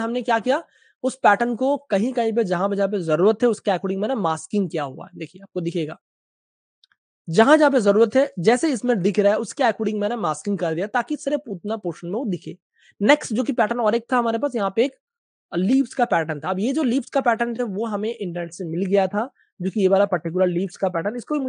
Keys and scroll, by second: 0.1 alt+super+z, 2.3 space, 16.9-18.2 typing, 19.3 v, 20.4 space.